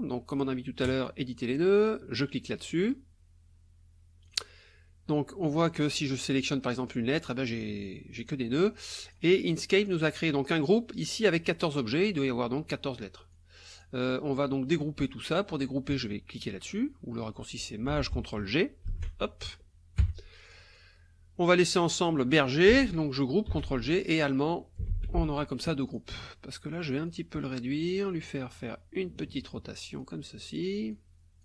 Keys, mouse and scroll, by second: 0.8 click, 2.7 click, 4.3 click, 5.7 click, 6.4 click, 8.2 click, 9.0 click, 9.8 click, 13.3 click, 18.9 ctrl+shift+g, 20.0 Caps_Lock, 20.5 click, 23.5 ctrl+g, 24.0-25.0 ctrl+drag, 24.9 ctrl+g, 25.9 click, 27.1-28.1 drag, 28.5 click, 30.0-30.8 drag, 30.9 click.